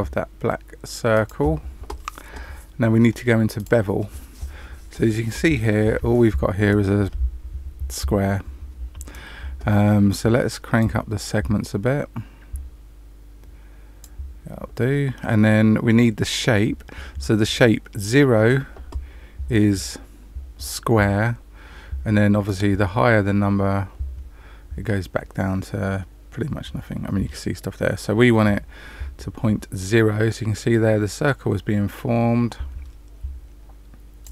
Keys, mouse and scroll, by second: 3.6 click, 10.7 click, 22.4 click.